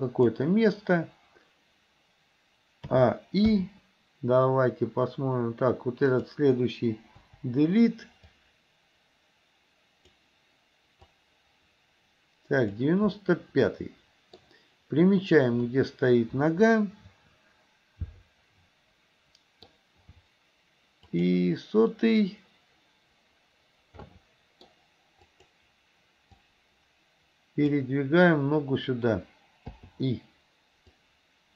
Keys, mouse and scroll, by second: 2.9 a, 3.6 i, 6.1 click, 7.3 Delete, 8.4-10.3 drag, 11.2-12.9 drag, 13.2-14.4 middle drag, 15.7-16.7 middle drag, 21.2 click, 24.1 middle click, 25.4 click, 26.5-27.9 drag, 29.8 i, 31.1-31.5 drag.